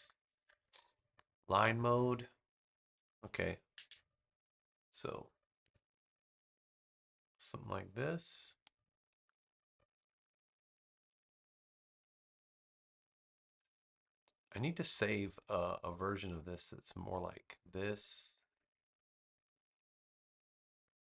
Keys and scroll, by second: 3.7 super+=, 4.4 space.